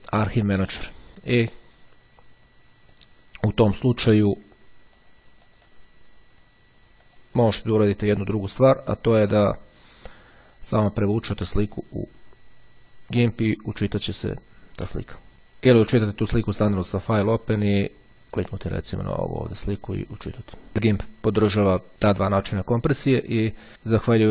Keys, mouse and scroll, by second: 4.0-4.9 drag, 5.1-6.3 drag, 7.2 click, 10.8-13.5 drag, 15.8 click, 17.4 click, 18.8 click, 20.5 click, 23.7-24.3 drag.